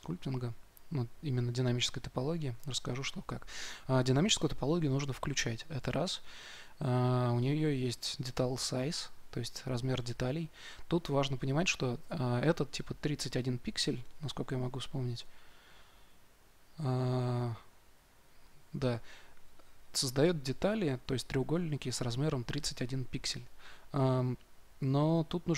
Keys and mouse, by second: 0.0-25.5 drag.